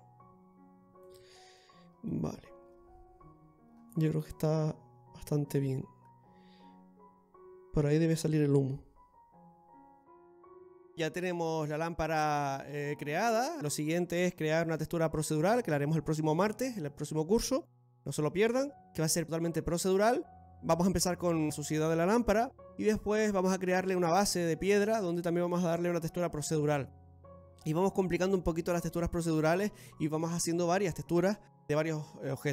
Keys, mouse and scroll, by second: 1.4-1.7 scroll down 2, 1.6 middle click, 2.3-2.9 scroll up 2, 3.8 scroll down 1, 4.3 middle click, 4.3 scroll down 2.